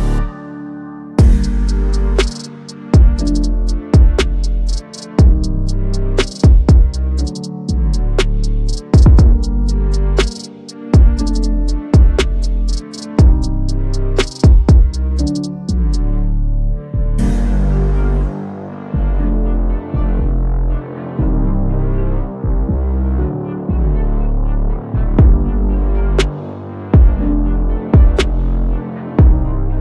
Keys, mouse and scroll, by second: 1.7 click, 3.5 ctrl+d, 4.6-10.4 drag, 12.3-13.5 typing, 14.1-17.4 drag, 24.2-26.5 drag.